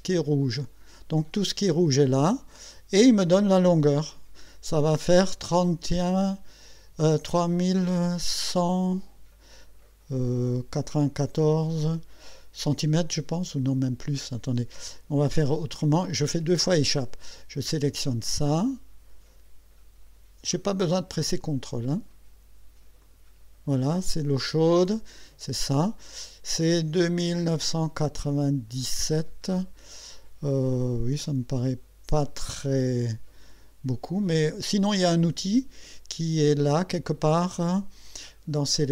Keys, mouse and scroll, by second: 0.4 click, 13.3 click, 14.8 Escape, 16.2 Escape, 18.2 click, 20.8 click, 23.0 click, 23.3-23.7 scroll up 1, 33.9 Escape, 34.7 click, 36.4 click, 38.6 click.